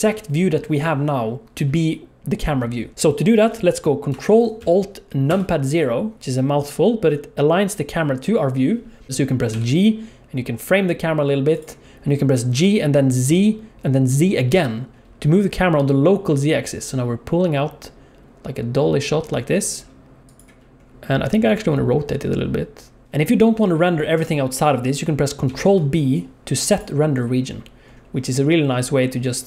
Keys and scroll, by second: 5.3 ctrl+alt+KP_0, 9.5 g, 14.6 g, 21.4 r, 23.0 ctrl+z, 25.5 ctrl+b.